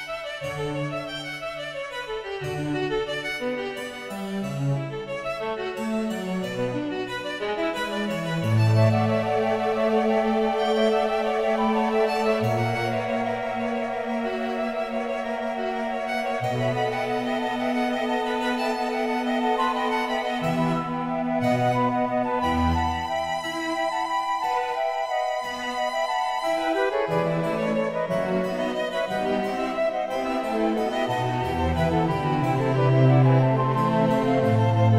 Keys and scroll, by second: 14.2 shift+a, 22.9 Tab, 25.7 g.